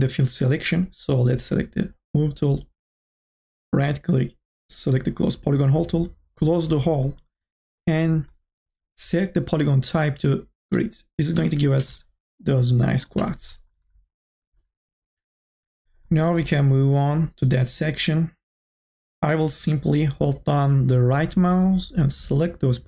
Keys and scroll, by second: 11.4-12.3 typing.